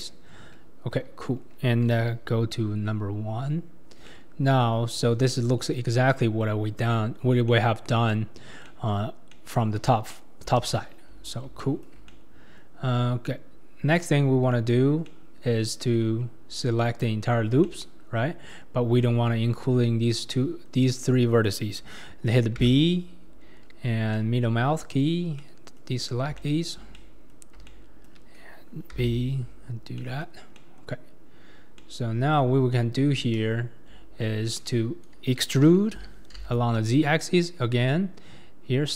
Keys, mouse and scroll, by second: 0.0 x, 0.4-2.8 scroll up 4, 2.8 1, 3.8 scroll down 2, 4.1 middle click, 4.9-5.6 scroll up 6, 5.6 middle click, 6.1 scroll up 1, 6.1-9.8 middle drag, 9.8 KP_1, 10.6 ctrl+KP_3, 11.2-11.6 scroll down 3, 11.6-12.8 shift+middle drag, 12.8-14.3 scroll up 6, 15.1-16.9 middle drag, 16.9 alt+click, 17.6-22.6 middle drag, 22.6 b, 25.2 scroll up 2, 25.4-28.9 middle drag, 28.9 b, 30.5 scroll down 1, 30.6 middle click, 31.5 scroll down 2, 31.8-33.3 middle drag, 33.3 ctrl+KP_3, 33.9-35.5 scroll down 11, 36.2 e, 37.0 click, 37.0 middle click, 37.0 right click.